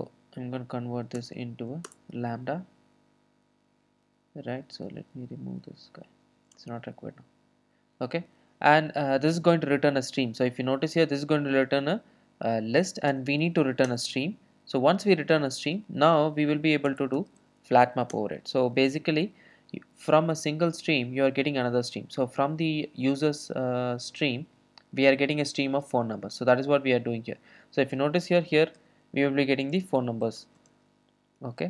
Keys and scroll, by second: 1.2 alt+Return, 13.9 Return, 18.2 Return.